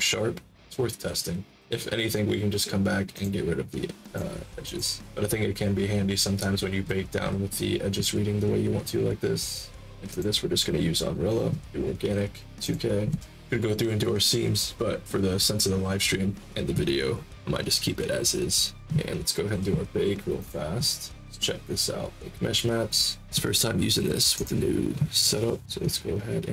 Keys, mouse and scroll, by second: 3.1 click, 4.0 click, 4.6 click, 10.0 click, 12.6 click, 20.3 click, 21.1-21.6 scroll down 2, 22.0 scroll down 1, 24.3 right click.